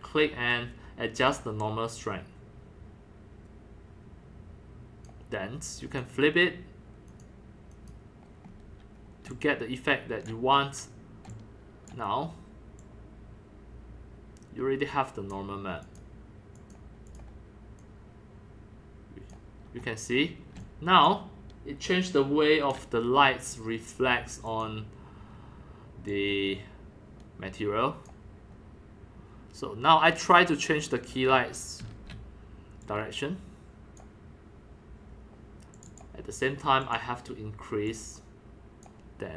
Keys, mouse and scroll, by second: 0.2-0.9 scroll down 4, 0.9 middle click, 1.3-6.8 drag, 1.3 scroll, 4.8 scroll down 4, 7.1 click, 7.7 click, 8.5 click, 8.5-9.2 scroll up 1, 9.2-10.3 c, 10.3 click, 10.5 middle click, 10.5 scroll up 1, 11.3 click, 11.9-15.3 drag, 15.7 click, 16.5 click, 17.1 click, 17.8-19.6 drag, 19.6-20.2 scroll down 1, 20.2 scroll up 1, 20.3 middle click, 20.6-22.7 c, 20.6 click, 22.0 click, 22.8 c, 23.5 drag, 24.5 click, 25.4 scroll up 1, 26.1-28.5 drag, 28.5 scroll up 1, 29.1 scroll down 1, 30.1 click, 30.4-31.8 drag, 31.8 e, 32.8-34.0 drag, 35.7 click, 35.9 click, 36.8 click, 37.9-38.8 drag.